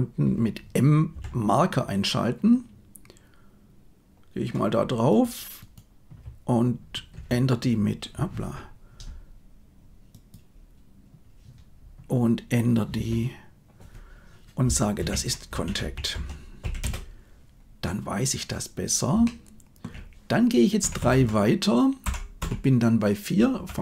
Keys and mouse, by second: 1.1 m, 5.1 click, 5.5 right click, 7.1 F2, 10.1 click, 12.9 F2, 19.3 shift+click, 20.8 Right, 20.9 Right, 21.1 Right, 22.0 Left, 22.3 Right, 23.5 Left, 23.7 Left.